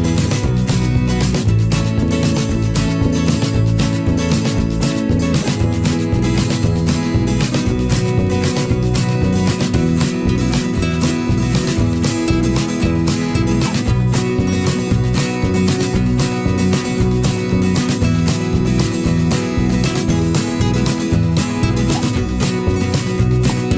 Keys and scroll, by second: 17.4 ctrl+alt+z.